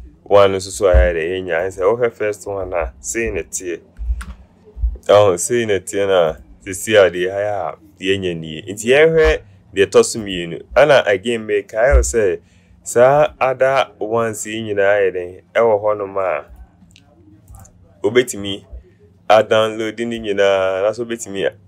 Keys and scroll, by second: 4.2 ctrl+0.